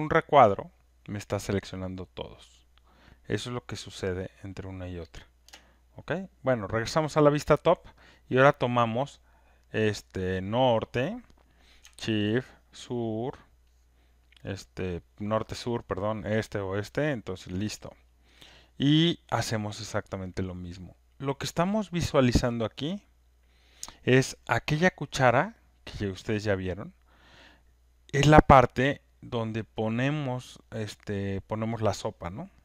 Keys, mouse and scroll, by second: 0.3 click, 8.8 click, 10.7 click, 12.7 ctrl+shift+click, 20.7-25.9 drag, 29.5 click.